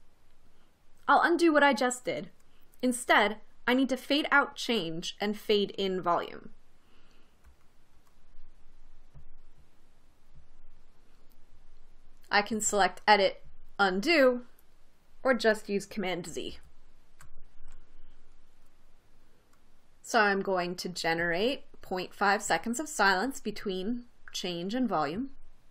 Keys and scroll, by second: 17.0 super+z.